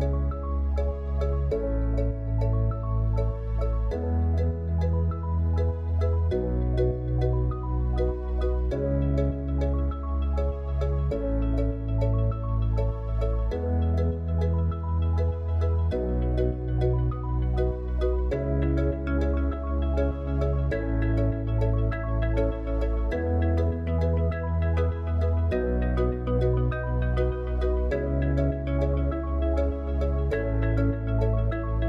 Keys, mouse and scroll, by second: 0.5 click, 2.0-5.1 middle drag, 10.2 click, 11.4-17.8 drag, 20.3-23.7 drag, 25.7 click, 27.7 click, 29.6 click.